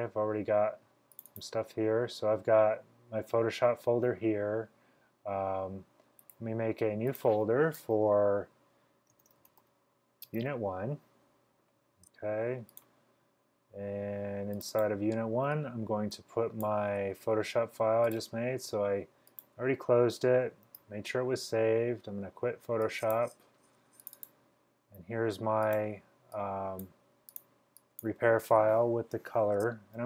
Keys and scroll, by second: 9.1-10.3 typing, 20.7 super+q.